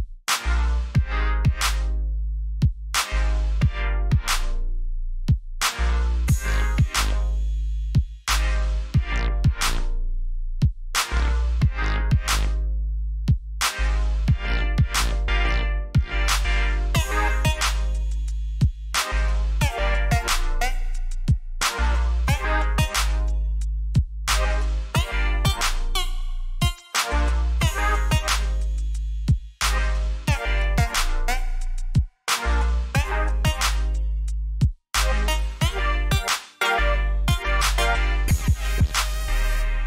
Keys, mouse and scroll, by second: 12.9 click, 14.4 alt+scroll up 1, 16.2 click, 21.6 ctrl+j, 22.6-23.3 typing, 23.6 click, 26.5 alt+scroll up 1, 27.4 scroll up 1, 27.6 click, 33.3 alt+scroll down 1, 34.1 alt+scroll up 1, 37.3 ctrl+Num_Lock, 38.3 ctrl+alt+shift+e.